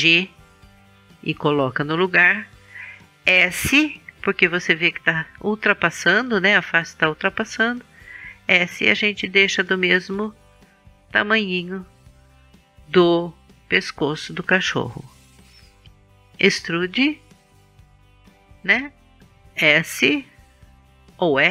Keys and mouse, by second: 0.0 g, 4.4 middle click, 7.3 s, 12.4-16.1 drag, 12.7 g, 16.7 e.